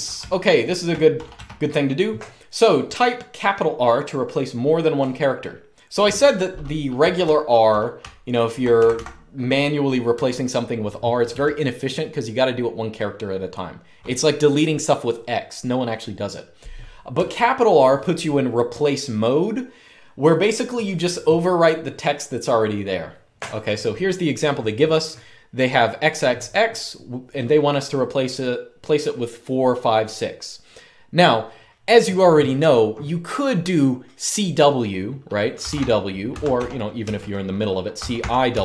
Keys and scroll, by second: 0.0-0.7 typing, 6.5-8.6 typing, 9.8 typing, 11.0 typing, 16.8 j, 35.1-38.6 typing.